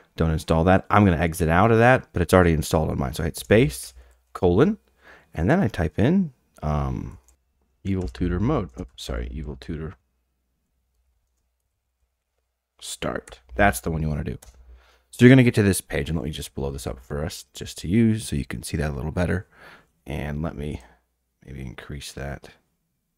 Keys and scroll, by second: 1.4 Escape, 3.3 space, 3.8 :, 6.3-9.3 typing, 8.0 Return, 10.4-12.7 typing, 13.3 Down, 14.4 Return, 16.5 ctrl+=, 16.7 ctrl+=, 16.8 ctrl+=, 17.5 ctrl+=.